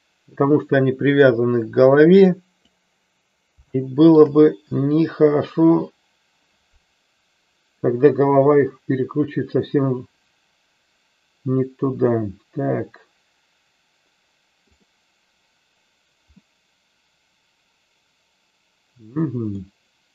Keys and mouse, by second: 3.8 shift+middle click, 15.3 click, 16.6-19.7 middle drag.